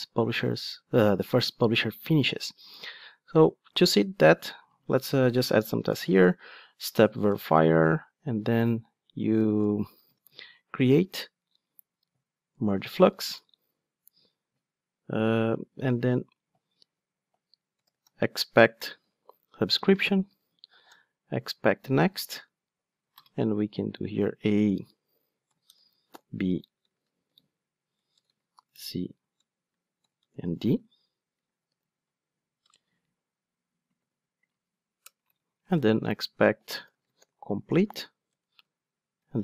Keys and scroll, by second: 7.3 Return, 19.1 Return, 38.3 Return.